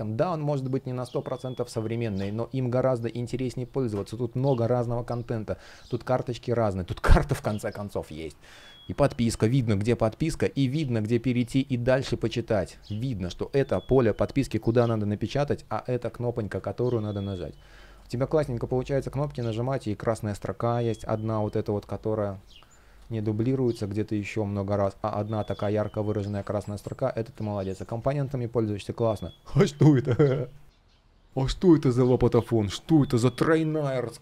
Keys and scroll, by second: 10.0 space, 12.5 super+z, 16.2 space, 22.6 space, 25.4 super+z, 26.0 super+z, 26.5 space, 27.5 space, 28.2 shift+o, 30.6 space.